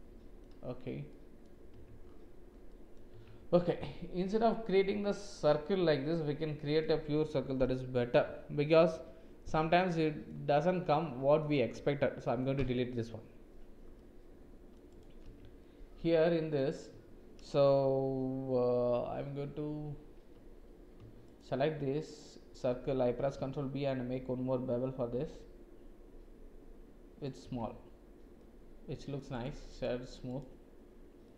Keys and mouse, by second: 1.1 click, 2.7 click, 3.1 Tab, 3.6 click, 5.3 click, 5.7-6.8 middle drag, 9.7 middle click, 11.0 middle click, 12.6 Delete, 13.9 middle click, 14.9 click, 15.3 Tab, 15.6 click, 16.1 middle click, 21.2 alt+click, 22.0 alt+click, 23.3 ctrl+b, 27.6 Tab, 28.4 middle click, 29.3-30.5 drag, 31.2 middle click.